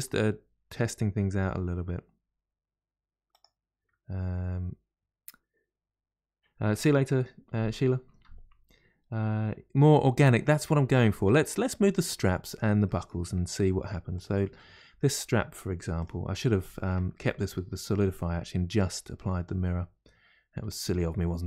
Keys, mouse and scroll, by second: 11.5 Tab, 11.7-12.4 middle drag, 12.4 click, 12.8 middle click, 13.4-14.1 scroll up 1, 14.1 click, 14.5-16.0 middle drag, 16.0 click, 16.6 Tab, 17.1-19.4 shift+middle drag, 19.4 click, 20.6 click, 21.0-21.4 middle drag.